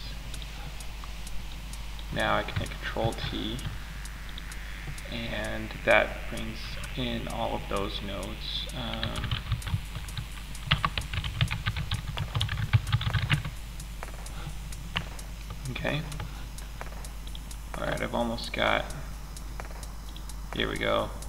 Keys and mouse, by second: 0.8-1.3 drag, 2.4 ctrl+t, 14.4-17.1 middle drag.